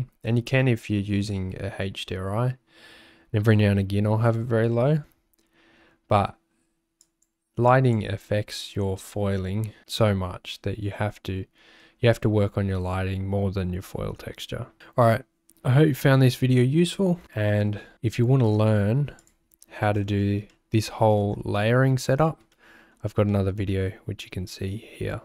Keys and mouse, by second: 19.2 click, 20.7 shift+click, 22.7 shift+click, 23.5 shift+click.